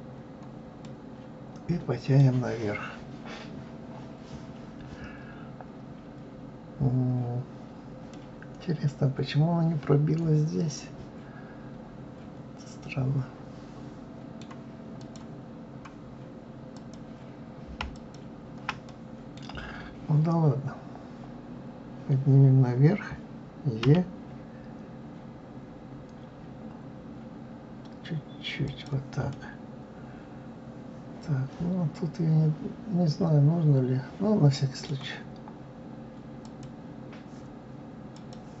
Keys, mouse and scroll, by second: 0.8-3.8 middle drag, 8.1-11.2 middle drag, 15.0 click, 16.7 click, 17.9 alt+click, 18.9-21.9 middle drag, 23.8 e, 29.3-32.3 middle drag, 36.4 click, 38.1 click.